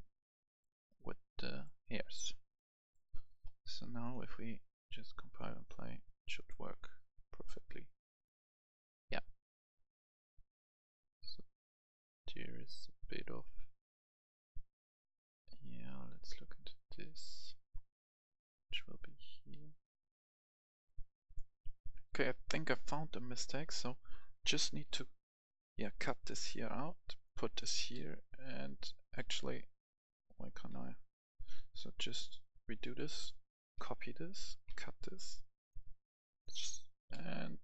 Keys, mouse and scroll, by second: 16.0-18.5 right drag, 18.6 click, 21.8 F10, 22.4 right click, 23.7 click, 24.9 ctrl+x, 26.8 click, 29.1 ctrl+v, 29.6 right click, 30.0 click, 30.7 ctrl+v, 31.4 ctrl+z, 32.2 right click, 32.7 click, 33.7 ctrl+c, 34.6 ctrl+x, 35.3 click, 37.1 ctrl+v.